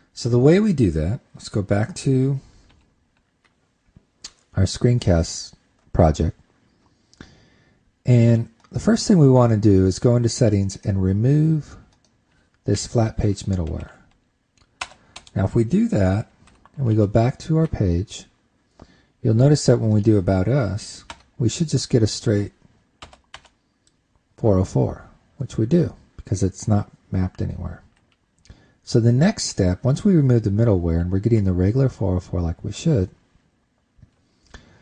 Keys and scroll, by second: 3.4 super+`, 13.7 super+Right, 14.4 shift+super+Left, 17.1 super+s, 17.6 super+Tab, 30.1 super+Tab.